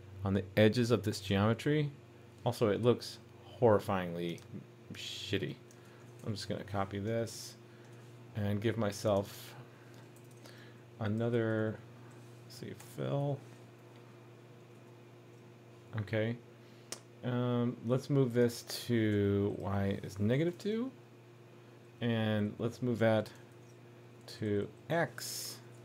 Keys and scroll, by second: 6.2 super+c, 7.4 super+v, 10.2 super+d, 14.7 super+s, 20.5 super+s, 23.5 shift+super+d.